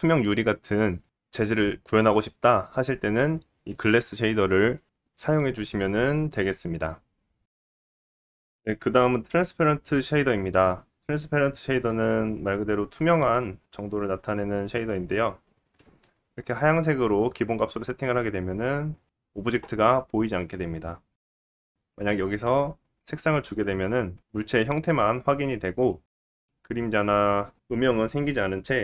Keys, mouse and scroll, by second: 0.0-15.2 middle drag, 7.3-7.9 scroll up 3, 8.8 scroll up 2, 15.2 click, 15.3-21.9 middle drag, 21.9 click, 22.0-28.8 middle drag.